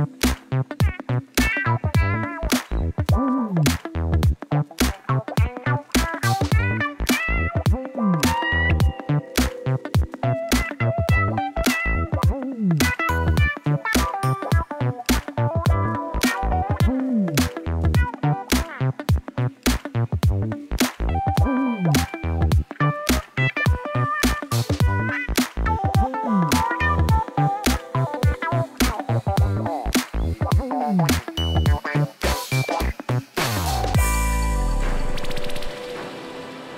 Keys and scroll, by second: 0.6 Tab, 1.9 Tab, 3.3 alt+a, 4.2 u, 5.4 Tab, 7.9 Tab, 9.2 2, 11.6 ctrl+b, 13.1 Tab, 15.9 alt+a, 19.6 Tab, 19.8 shift+z, 20.8 shift+z, 21.3 g, 21.5 y, 24.6 3, 26.5 u, 27.8 Tab, 28.7 alt+a.